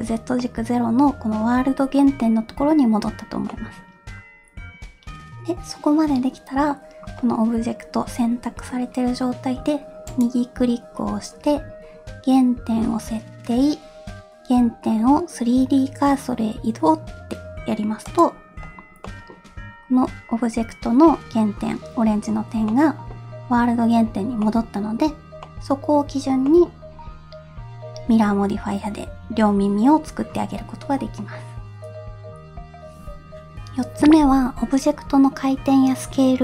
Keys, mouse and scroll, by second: 0.5-1.5 middle drag, 2.2 scroll down 1, 2.3-3.1 middle drag, 3.6 middle click, 4.1-4.8 scroll up 1, 10.2-19.1 right drag, 19.1 middle click, 21.8-22.6 scroll up 1, 22.8-24.0 middle drag, 24.5 middle click, 25.4 scroll down 1, 25.5 middle click, 26.6 middle click.